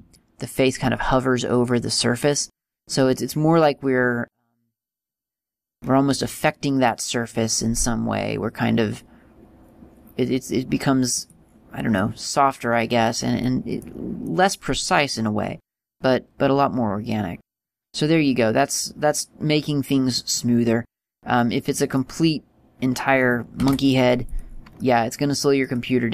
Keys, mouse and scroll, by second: 0.2 shift+middle click, 4.0-4.7 scroll down 4, 5.2 scroll down 2, 6.3-7.1 scroll down 1, 6.3 g, 12.2 middle click, 20.8-21.4 scroll down 3, 22.3 middle click, 22.3 scroll down 2, 23.8 x, 24.9 middle click.